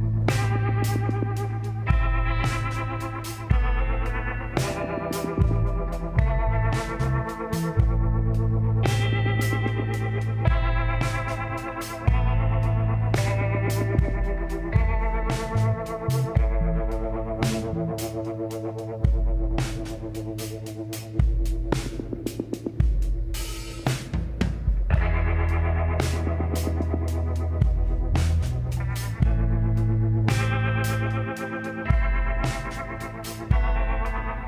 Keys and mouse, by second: 2.1-3.7 drag, 3.2 l, 3.5 l, 4.0 l, 5.1 l, 5.6 middle click, 5.9 KP_1, 6.1 click, 13.9-15.0 middle drag, 15.4 KP_1, 17.1 shift+d, 21.1-22.7 middle drag, 22.7-24.4 drag, 25.1 middle click, 26.5-28.3 drag, 28.3 middle click, 28.7-30.6 drag, 30.8-33.2 drag, 33.2-34.4 middle drag.